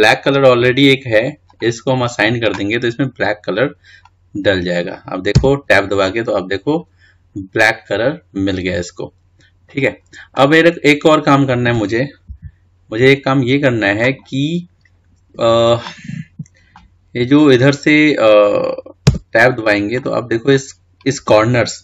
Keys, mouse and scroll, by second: 1.1 click, 2.3-3.6 drag, 3.6-4.1 scroll down 2, 4.1-5.0 scroll up 2, 5.0-6.3 middle drag, 6.3 Tab, 7.0-9.9 middle drag, 10.2-13.1 middle drag, 13.1 KP_1, 15.2-15.8 scroll up 3, 15.9-16.7 scroll down 1, 17.3 scroll up 2, 20.1 Tab, 20.9-21.8 middle drag.